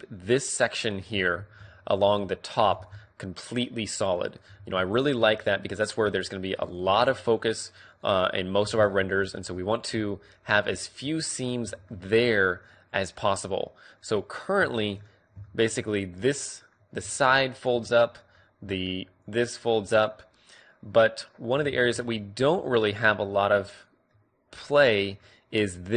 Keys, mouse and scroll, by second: 0.7-2.7 middle drag, 1.3 a, 2.0-3.8 right drag, 2.7 ctrl+e, 4.1 middle click, 4.4 a, 4.9-6.4 right drag, 5.2 ctrl+e, 6.0 a, 9.9 right click, 9.9 a, 10.9-12.8 middle drag, 16.9 d, 17.1-18.9 drag, 17.6 d, 18.6 d, 19.1-20.9 drag, 19.1-19.9 d, 19.9-21.7 right drag, 21.4 d, 21.7-25.9 middle drag.